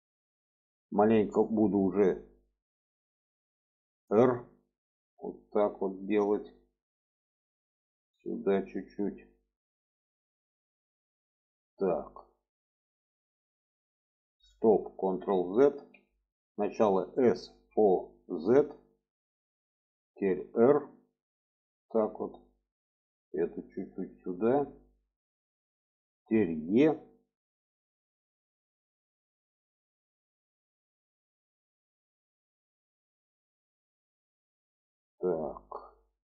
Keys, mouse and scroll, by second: 3.9 r, 7.4-8.8 drag, 14.8 ctrl+z, 16.8 s, 20.2 r, 22.6 click, 23.6 click, 24.8 click, 26.5 e, 30.8-36.2 middle drag.